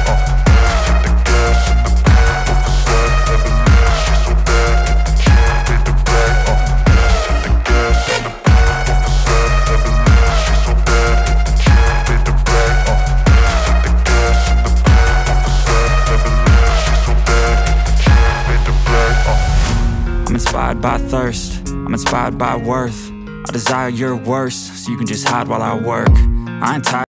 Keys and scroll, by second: 0.0-4.5 typing, 4.7 ctrl+s.